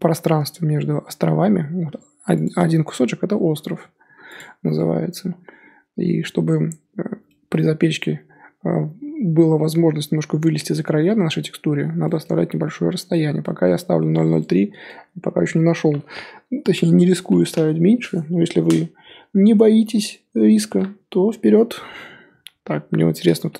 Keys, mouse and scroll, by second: 2.4 click, 3.4 l, 4.3 click, 4.5-5.1 scroll down 3.